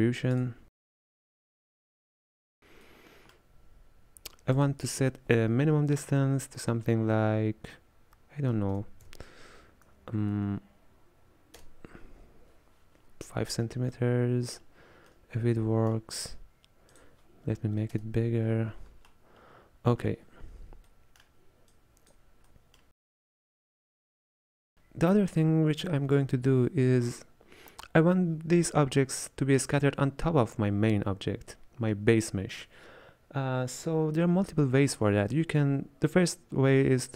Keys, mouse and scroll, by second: 1.7 click, 2.9-4.6 middle drag, 4.6-7.7 drag, 14.0-17.0 middle drag, 17.0-19.2 drag, 19.2-21.8 middle drag, 21.8 click, 22.6-23.9 middle drag, 23.9 scroll down 1, 24.0-26.5 middle drag.